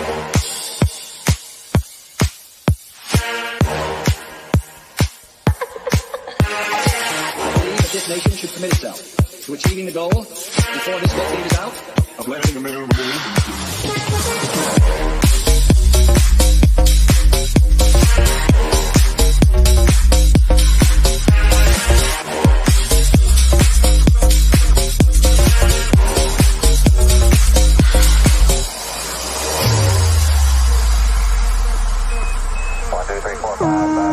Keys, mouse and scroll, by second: 0.9 middle click, 1.9 click, 3.3 click, 4.0 click, 6.9 shift+middle click, 7.2 scroll down 1, 7.3-8.5 middle drag, 8.5 click, 8.9 shift+middle click, 9.3 scroll down 1, 9.4 middle click, 9.9-11.0 drag, 11.0 middle click, 11.2-11.5 scroll down 1, 11.6 click, 12.1 middle click, 12.5 scroll up 1, 12.7 click, 12.8 middle click, 13.4 click, 13.9 scroll up 1, 14.1 click, 14.4 Up, 15.4 click, 17.3 click, 19.5 shift+middle click, 20.1 scroll down 1, 20.1-22.0 middle drag, 22.0 click, 23.9 scroll up 1, 24.3 click, 25.8 shift+middle click, 26.2 scroll down 1, 26.4 middle click, 27.0 scroll down 1, 27.1-29.4 middle drag, 29.4 scroll up 1, 29.6-31.5 shift+middle drag, 31.5 click, 33.0 shift+middle click, 34.0-34.1 scroll down 1.